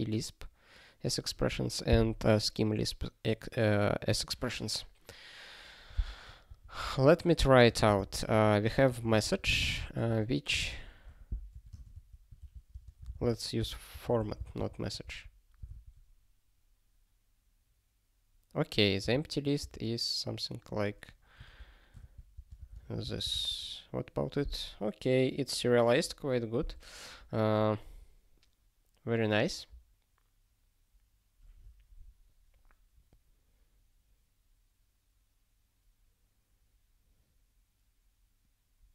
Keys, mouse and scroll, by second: 6.5 ctrl+a, 7.5 (, 7.8 m, 9.7 space, 10.0 ", 11.5-14.9 typing, 12.4 ctrl+f, 13.0 alt+b, 13.2 alt+b, 13.7 alt+d, 15.2 ctrl+e, 15.8 ctrl+e, 19.0 ctrl+b, 19.6 ctrl+b, 22.3 space, 22.4 2, 22.6 space, 22.7 2, 23.0 ctrl+e, 32.7 scroll up 1, 34.5-36.8 scroll up 1.